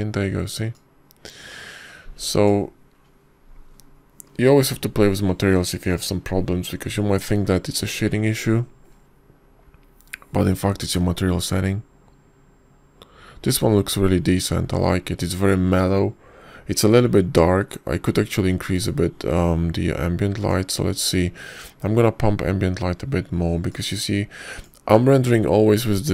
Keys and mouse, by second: 25.6 click.